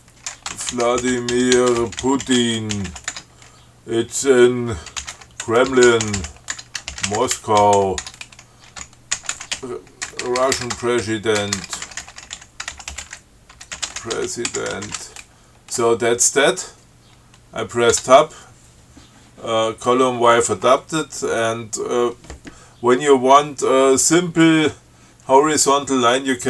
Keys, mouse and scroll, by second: 0.0-3.6 typing, 5.1-15.8 typing, 18.2 Tab.